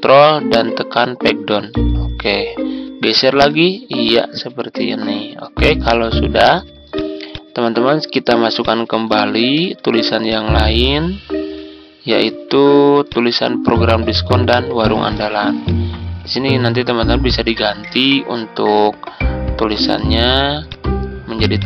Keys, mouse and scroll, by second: 1.7 ctrl+Page_Down, 3.4 Right, 6.8-8.5 drag, 9.6 ctrl+g, 10.2 click, 10.6 Tab, 11.6 Tab, 13.0 click, 15.1 ctrl+c, 15.6 click, 16.6 Tab, 17.3 Tab, 20.6 click.